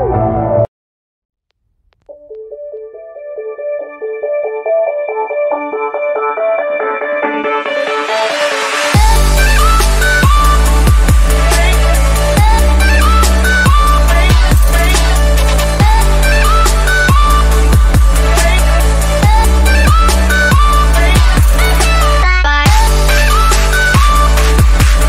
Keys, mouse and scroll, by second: 4.0 ctrl+z, 5.0-9.9 drag, 11.3-16.7 drag, 17.1 r, 17.3 click, 19.0 click.